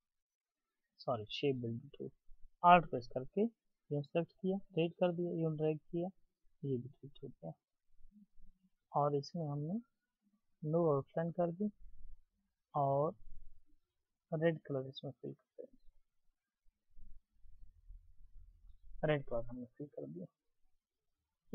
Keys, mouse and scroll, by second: 3.3 alt+click, 5.1 alt+click.